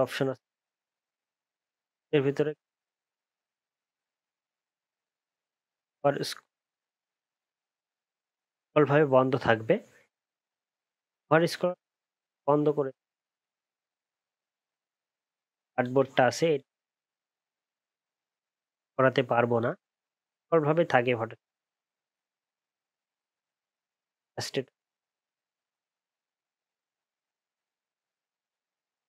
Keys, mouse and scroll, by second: 8.9 alt+scroll up 1, 9.1 alt+scroll down 1, 9.7 alt+scroll up 1, 11.8 alt+scroll down 5, 12.1 alt+scroll up 1, 13.1 alt+scroll down 1, 17.1 alt+scroll up 6, 17.4-20.3 alt+scroll down 2, 20.3 alt+scroll up 1, 20.5 alt+scroll down 1, 20.7 alt+scroll up 1, 20.9 alt+scroll down 1, 21.1 alt+scroll up 1, 22.1-22.7 alt+scroll down 1, 22.7-23.0 alt+scroll down 4, 23.1 alt+scroll up 1, 23.3 alt+scroll down 1.